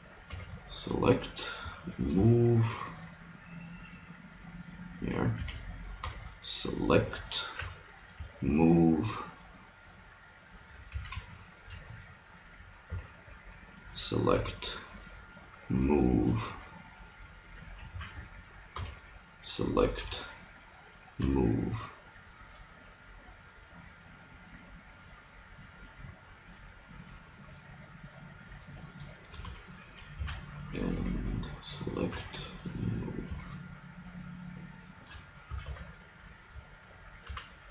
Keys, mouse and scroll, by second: 0.3 b, 1.6 g, 5.4 a, 6.1 b, 7.6 g, 11.0 a, 11.3-13.0 middle drag, 12.8 b, 14.4 g, 17.7 click, 18.0 a, 18.8 b, 20.0 g, 29.0-32.2 middle drag, 30.2 a, 31.0 b, 32.2 g, 35.6 a, 35.7 Tab, 37.3 z, 37.5 middle click.